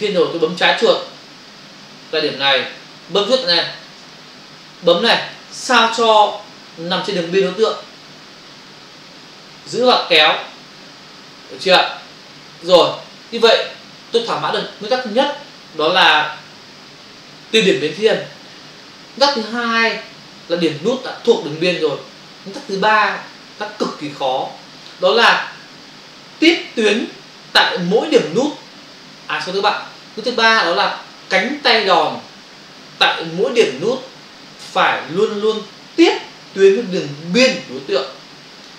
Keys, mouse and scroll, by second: 4.0 ctrl+click, 9.3 click.